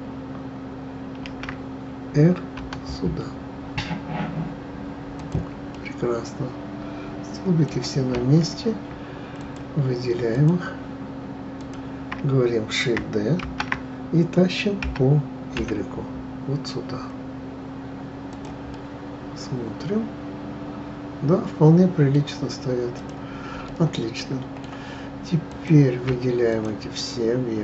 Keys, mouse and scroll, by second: 1.2 shift+d, 5.7-8.7 middle drag, 9.4 shift+click, 10.3 shift+click, 11.6 shift+click, 13.4 shift+d, 18.7-21.8 middle drag, 23.0 click, 23.6-25.5 middle drag, 25.5 click, 26.5 shift+click.